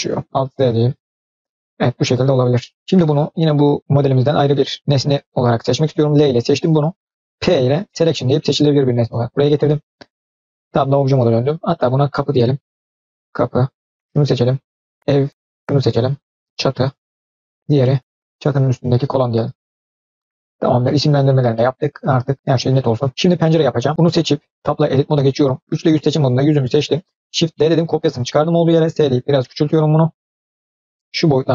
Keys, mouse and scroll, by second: 0.5 alt+z, 0.7 click, 1.0-2.7 middle drag, 4.2 click, 5.9 l, 7.2 p, 10.5 Tab, 11.3 click, 12.7 click, 13.8 scroll up 2, 13.8 scroll down 3, 13.9-15.3 drag, 15.6-17.2 drag, 17.5 click, 17.6-18.4 scroll down 3, 17.7 middle click, 18.4 click, 18.8 click, 19.9 click, 20.4 drag, 20.7-21.1 middle drag, 21.2-21.8 scroll up 2, 21.4-21.8 middle drag, 21.9 scroll down 1, 22.3 shift+middle click, 23.1 middle click, 23.3-23.6 scroll down 1, 23.6 middle click, 23.9 click, 24.7-25.0 scroll up 2, 25.1 scroll down 1, 25.6 3, 25.8 click, 26.3-26.6 scroll down 1, 26.6 middle click, 27.3 shift+d, 28.7 s.